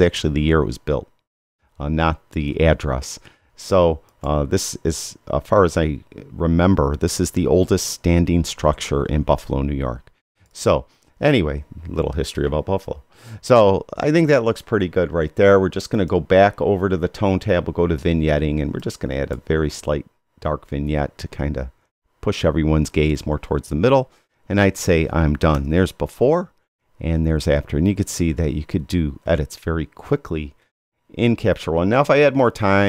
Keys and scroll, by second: 25.5 y, 26.7 y.